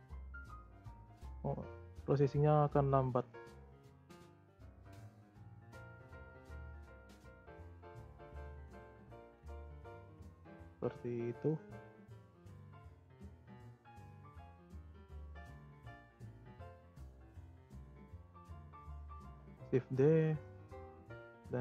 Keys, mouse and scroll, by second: 12.2-12.5 scroll down 4, 12.5 scroll up 3, 12.7 z, 13.3 scroll down 1, 13.8 click, 14.1-14.7 scroll up 11, 14.7-15.2 middle drag, 15.2-15.6 scroll up 3, 15.6-17.6 middle drag, 17.6 click, 18.0-19.2 scroll down 2, 19.2 shift+d.